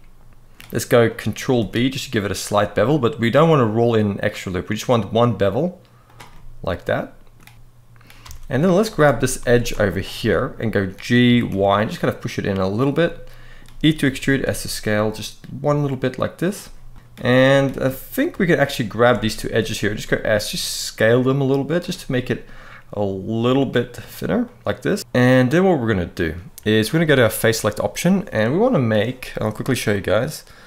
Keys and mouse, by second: 0.8 middle click, 1.3 ctrl+b, 5.7 click, 6.0-7.1 middle drag, 8.5 alt+shift+click, 9.1 alt+a, 10.0 middle click, 11.0 g, 11.2 y, 12.4 click, 12.7 middle click, 13.7 e, 14.0 s, 16.6 middle click, 18.4 alt+shift+click, 19.5 s, 21.5 click, 22.6 middle click, 24.2-26.0 middle drag, 25.0 g, 25.0 y, 27.2 click, 28.4 middle click.